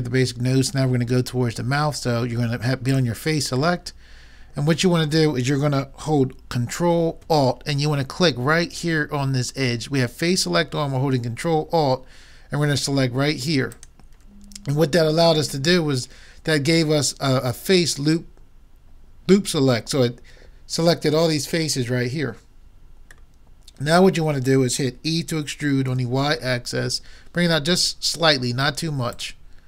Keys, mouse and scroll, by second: 0.9-2.7 middle drag, 2.9-4.6 drag, 4.0-5.7 middle drag, 4.0 right click, 13.7-15.5 drag, 23.3-25.1 middle drag, 25.1 e.